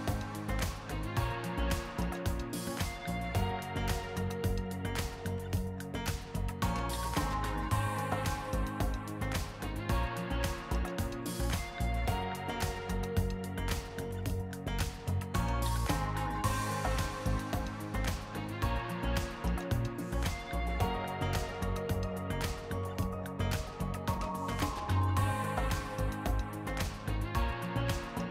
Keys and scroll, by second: 9.8 ctrl+s, 14.0 ctrl+s, 15.5 s.